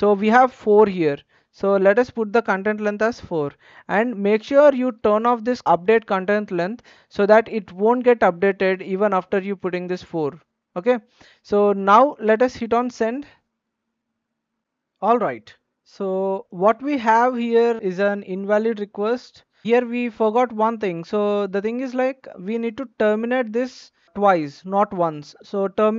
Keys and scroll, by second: 3.2 4.